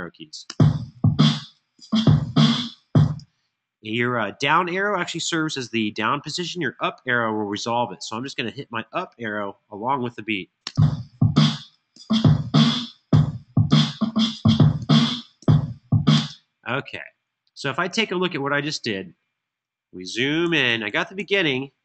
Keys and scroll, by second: 0.1 space, 2.7 space, 5.6 Tab, 10.3 space, 11.1 Up, 11.7 Up, 12.3 Up, 12.9 Up, 14.6 Up, 15.9 space, 19.8 super+], 20.2 super+], 20.6 super+].